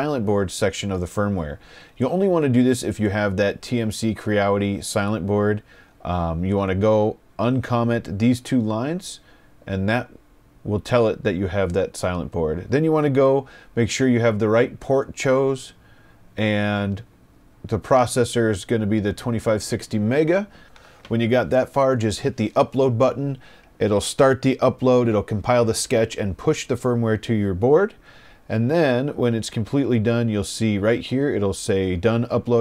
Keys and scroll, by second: 9.6 BackSpace, 10.6 BackSpace.